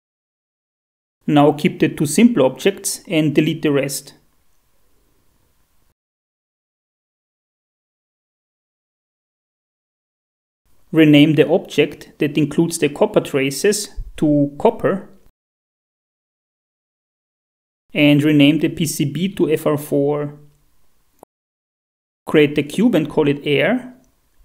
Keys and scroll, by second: 1.2 shift+F4, 7.2 a, 10.2 Delete, 16.4 F2, 16.6-17.9 typing, 20.6 Down, 21.3 f, 21.6 4, 23.3 Return, 23.3 4.